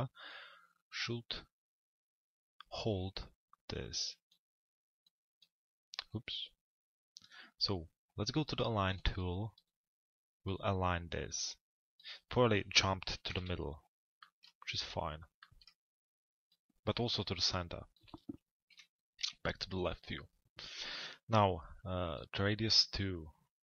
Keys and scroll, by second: 13.0 t, 13.4 z, 18.4 l, 19.2 z.